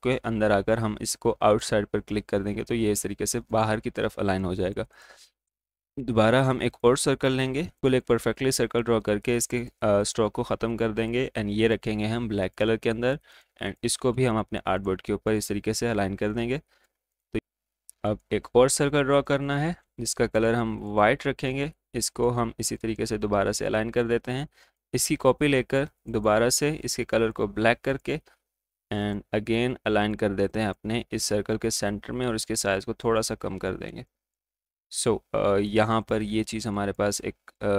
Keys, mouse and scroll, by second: 1.5 click, 6.6 right click, 7.4-9.2 drag, 18.2 right click, 18.9-26.1 drag, 26.1-33.5 drag, 33.5 alt+scroll up 1, 34.2 click.